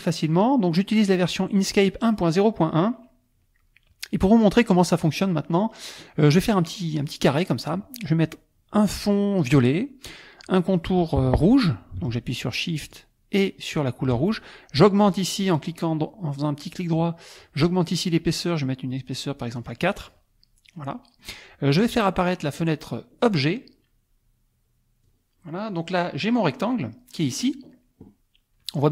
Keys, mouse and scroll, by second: 1.2 click, 1.6 click, 4.9 click, 5.5 click, 6.5-7.9 drag, 9.5 click, 12.8 shift+click, 15.6 right click, 19.5 click, 20.8 click, 21.9 click, 23.2 click, 25.0 click.